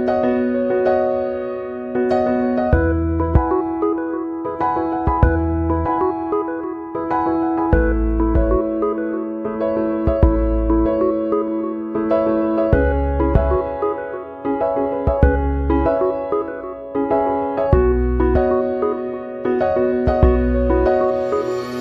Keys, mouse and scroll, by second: 5.7 click, 6.5 click, 7.8 click, 11.9 click, 13.7-15.0 drag, 16.7 click.